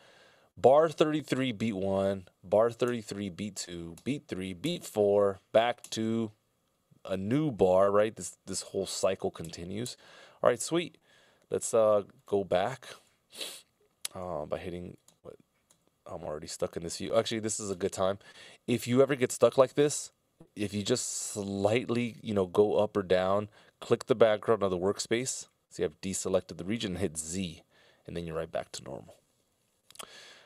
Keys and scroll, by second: 2.9 alt+Right, 3.8 alt+Right, 4.6 alt+Right, 6.0 alt+Right, 8.5 alt+Left, 9.5 alt+Left, 10.0 alt+Left, 28.9 z.